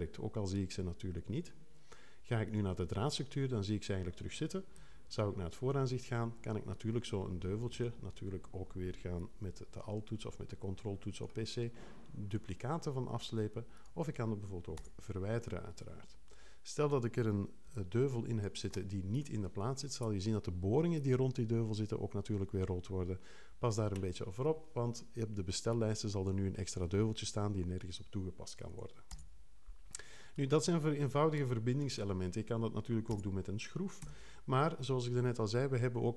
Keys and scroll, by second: 4.7 2, 14.7 BackSpace, 29.1 BackSpace, 33.1 BackSpace, 34.0 3.